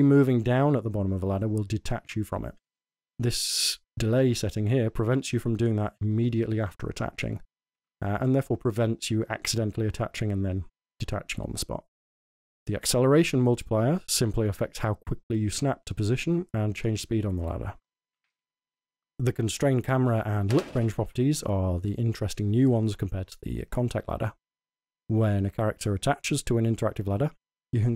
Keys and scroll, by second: 18.1 a, 21.1 a.